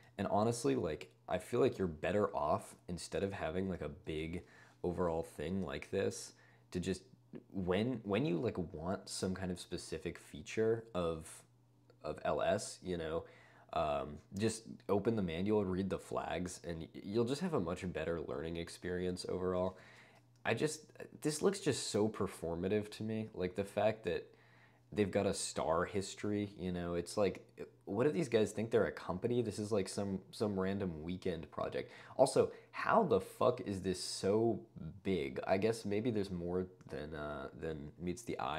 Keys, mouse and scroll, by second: 0.7 ctrl+d, 1.4 ctrl+d, 3.9 d, 4.5 ↻, 19.8 shift+h, 22.5 d, 23.0 d, 23.5 d, 23.8 d.